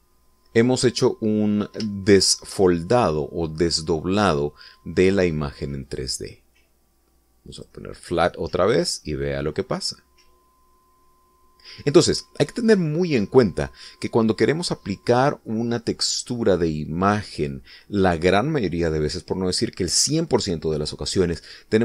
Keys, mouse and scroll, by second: 2.2-2.6 scroll up 2, 3.1 shift+middle click, 4.1-6.2 scroll up 2, 6.9 click, 8.6 click, 9.6-9.9 scroll down 2, 10.1-13.7 middle drag, 13.7-16.4 scroll up 2.